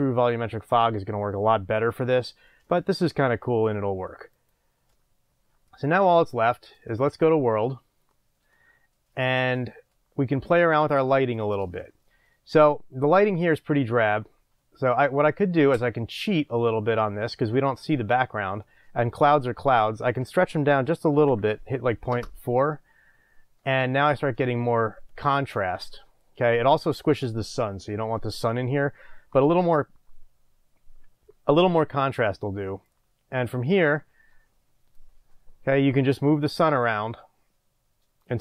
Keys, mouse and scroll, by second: 7.2-38.4 drag, 22.7 Return.